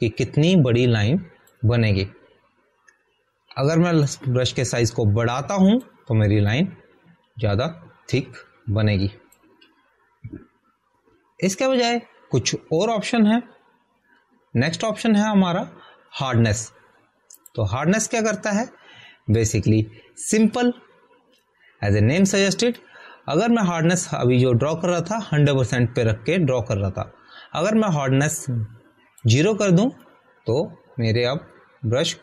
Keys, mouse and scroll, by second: 0.9 click, 5.8 click, 19.3 click.